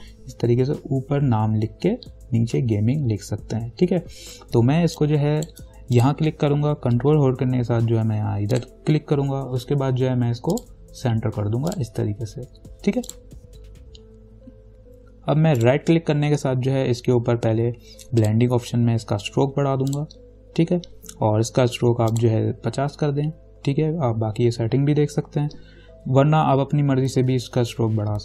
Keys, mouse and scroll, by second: 5.2 click, 8.8 ctrl+click, 10.7 click, 15.8 right click, 18.4 click, 22.3 click.